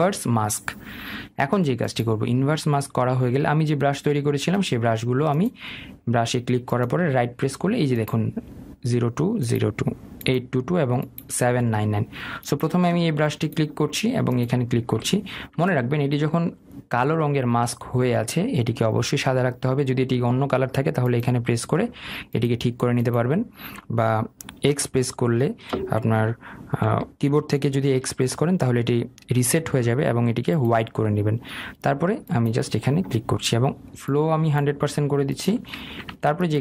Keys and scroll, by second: 15.9 ctrl+z, 36.5 ctrl+z.